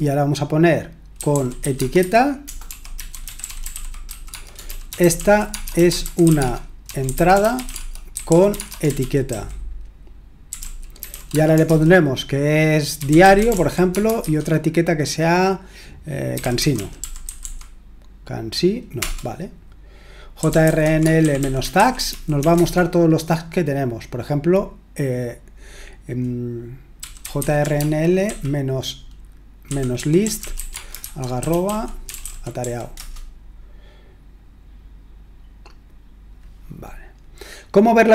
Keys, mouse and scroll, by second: 0.9-14.7 typing, 16.1-17.9 typing, 19.0 Return, 20.1-22.9 typing, 26.8-28.2 typing, 29.4-33.1 typing.